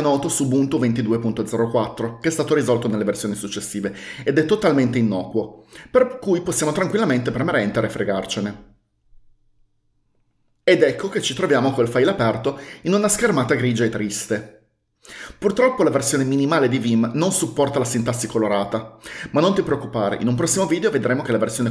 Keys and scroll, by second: 8.1 Return.